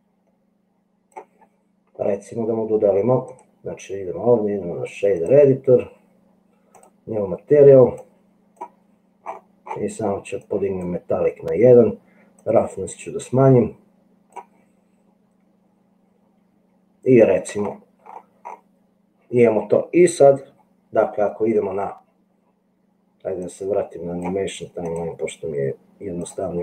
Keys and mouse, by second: 0.1-1.5 drag, 3.3-5.5 drag, 6.8 click, 8.1 click, 10.4 right click, 12.5 right click, 12.7-14.6 drag, 23.7 middle click, 24.1 click, 25.4 click.